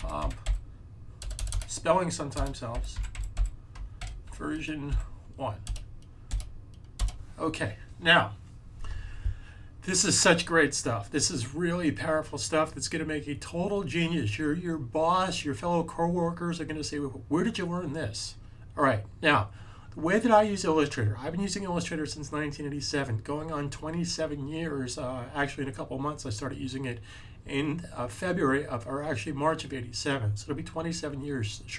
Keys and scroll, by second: 0.0-4.7 typing.